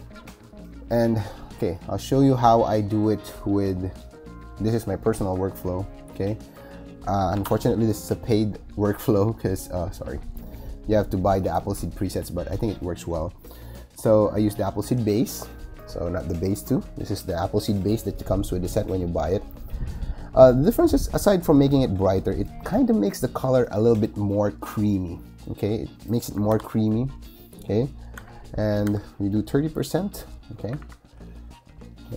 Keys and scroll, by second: 7.2 shift+super+e, 26.4 super+i, 28.1 b, 28.7 3, 30.5 ].